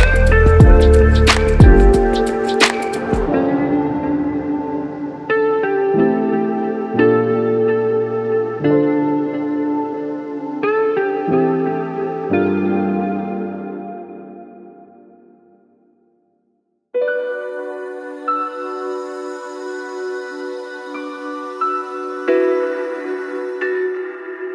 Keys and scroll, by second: 2.5 p, 3.2 alt+], 3.6 ctrl+=, 7.3 Right, 7.3 Left, 7.8 Right, 8.8-9.2 Left, 9.4-9.8 Right, 23.2 p, 24.2 Delete.